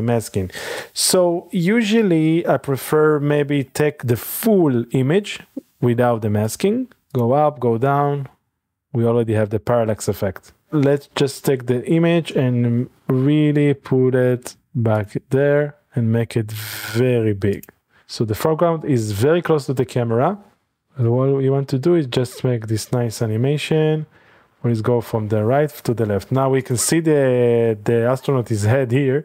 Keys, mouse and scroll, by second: 1.0 click, 4.1 click, 4.3 typing, 4.5-5.7 drag, 8.2-9.9 drag, 10.2 middle click, 10.2-10.7 scroll up 1, 10.7-12.1 drag, 12.1 typing, 14.5-15.4 typing, 15.0 click, 17.7 click, 18.0-18.8 scroll up 1, 18.0 n, 18.8 middle click, 18.9-20.5 drag, 20.5-21.2 middle drag, 20.5-21.0 scroll down 1, 21.2 click, 22.1 scroll up 1, 22.4-23.5 middle drag, 22.6 g, 22.8 x, 26.6 click, 26.8 click, 27.5 g, 27.7 x, 28.3-29.2 drag.